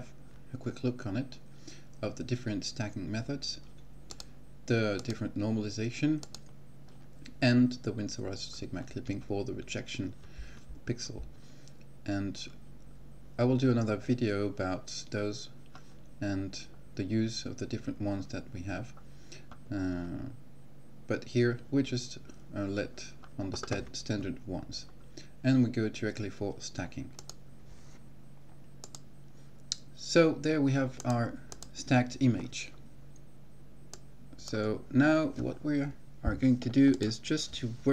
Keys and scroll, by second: 28.6 ctrl+x.